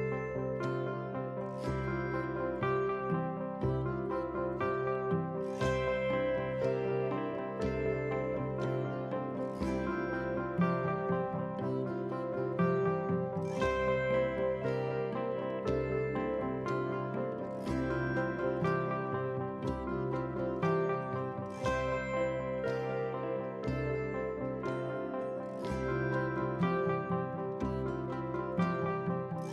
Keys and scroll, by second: 17.8 ctrl+c, 18.2 ctrl+v.